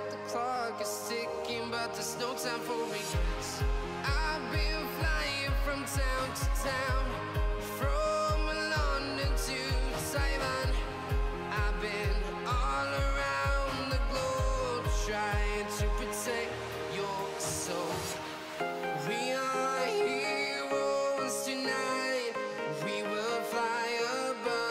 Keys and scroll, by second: 18.2 Escape, 20.4 Escape, 20.7 ctrl+x.